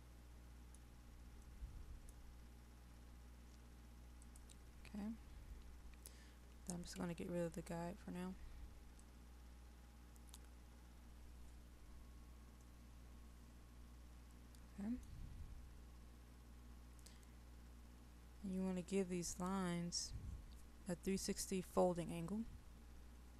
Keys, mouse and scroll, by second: 4.2 click, 7.0 Delete, 9.1 click, 12.6-15.4 middle drag.